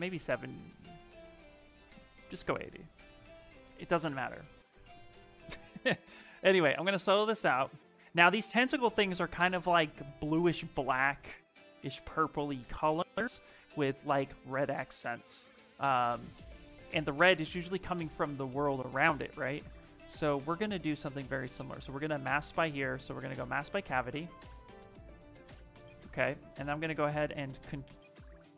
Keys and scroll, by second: 1.7 BackSpace, 17.0 s, 26.8 ctrl+h.